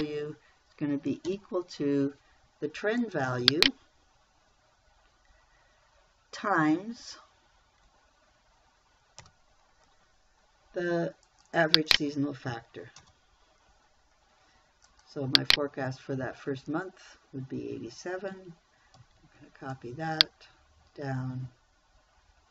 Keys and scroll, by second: 1.7 =, 9.7 shift+8, 13.4 Return, 19.4 ctrl+c.